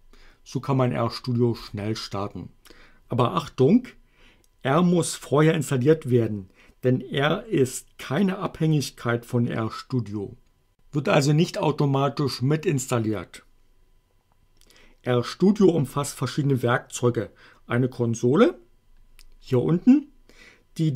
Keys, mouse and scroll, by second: 1.7 click.